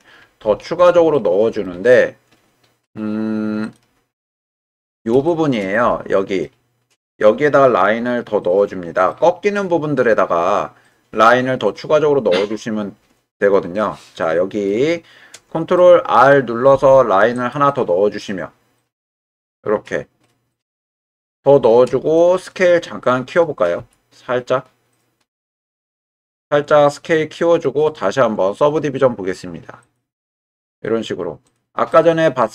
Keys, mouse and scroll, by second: 0.5 Tab, 1.1 middle click, 3.6 click, 4.3 middle click, 5.3 shift+middle click, 5.7 middle click, 9.1-12.7 middle drag, 12.7-14.7 right drag, 15.7 middle click, 16.7 ctrl+r, 19.0 right click, 19.5-22.4 middle drag, 23.8 s, 25.3 click, 26.0-28.6 middle drag, 30.7 Tab, 31.4 click, 31.9-32.5 middle drag.